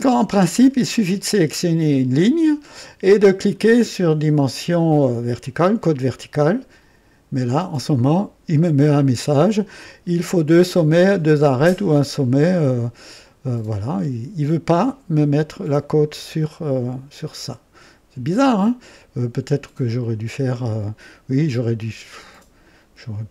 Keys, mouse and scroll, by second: 1.2 click, 6.3 click.